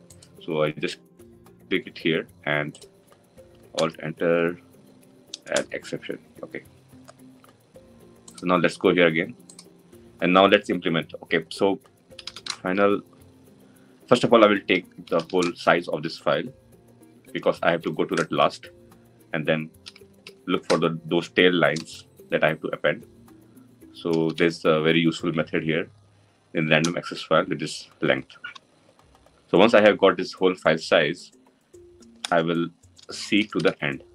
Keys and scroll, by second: 2.9 alt+Return, 26.6 Return.